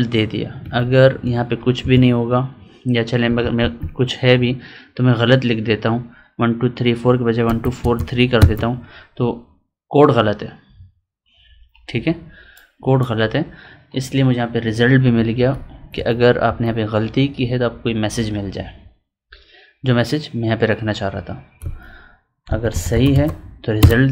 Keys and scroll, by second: 0.5 Up, 1.7 Delete, 14.9 Left, 15.3 Down, 15.5 Right, 15.9 Up, 17.3 Down, 21.6 Up.